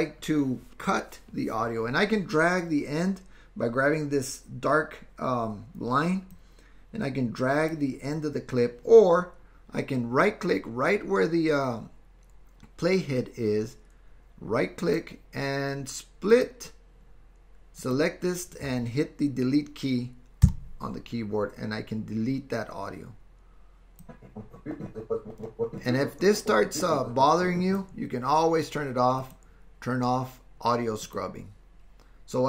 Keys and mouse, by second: 6.3-7.8 drag, 14.8-16.5 right drag, 16.7 typing, 20.6 Delete, 20.6 typing, 24.1-27.8 drag, 29.2-31.8 drag.